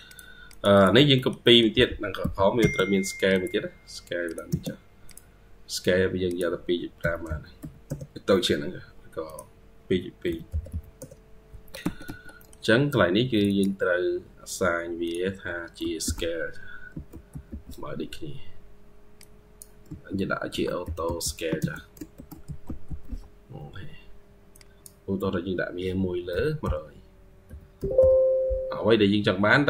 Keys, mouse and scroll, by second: 0.3 double click, 0.6 double click, 1.0 middle click, 1.3 middle click, 1.6 typing, 7.1-7.4 typing, 7.7 Return, 11.7 Escape, 11.9 Escape, 12.2 middle click, 13.3 double click, 17.3 typing, 20.1-23.4 typing, 27.5 typing.